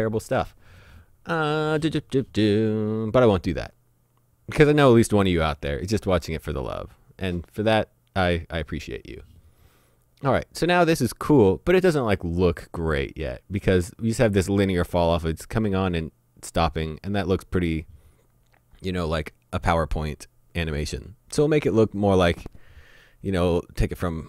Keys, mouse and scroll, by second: 3.7 click, 11.3 click.